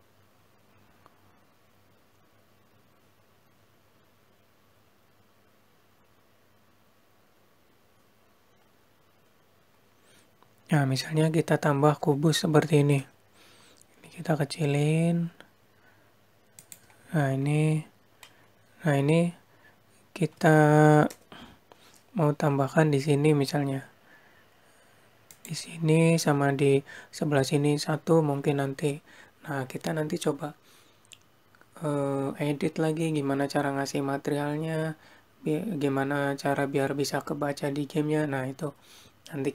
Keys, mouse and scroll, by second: 11.9-12.7 scroll down 2, 12.7 scroll up 1, 20.2-20.6 scroll up 4, 20.6-21.0 scroll down 2, 21.5-21.9 scroll down 2, 21.9-23.0 scroll up 1, 24.1 g.